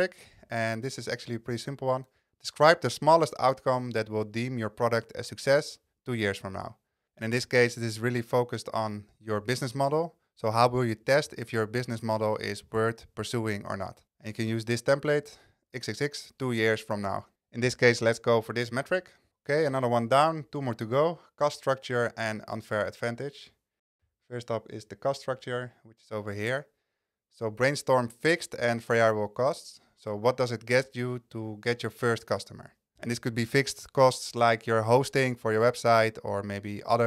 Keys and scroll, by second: 18.8 super+c.